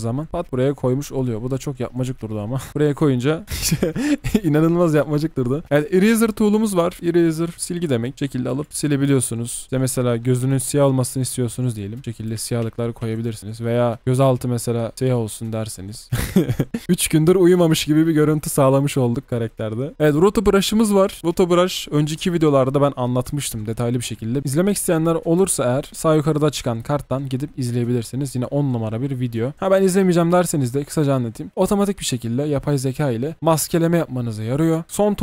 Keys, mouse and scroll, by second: 3.4 alt+click, 8.7 ctrl+z, 9.8 ctrl+z, 12.6 ctrl+z, 13.0 ctrl+z, 16.0-17.6 alt+scroll down 1, 17.6-17.9 alt+scroll, 17.9-18.3 alt+scroll up 1, 18.3-18.8 alt+scroll down 1, 18.8-19.9 alt+scroll up 1.